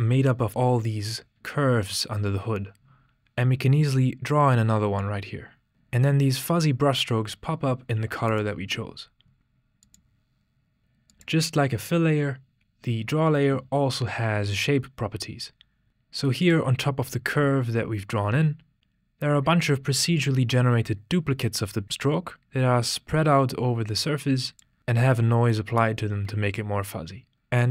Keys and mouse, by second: 11.4 click, 16.6 click, 20.2-24.7 drag, 24.8-27.3 drag.